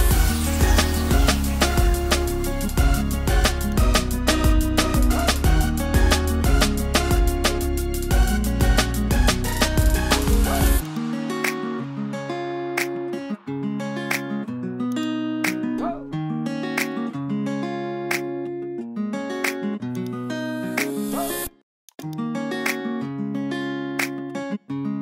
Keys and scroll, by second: 11.6 super+0.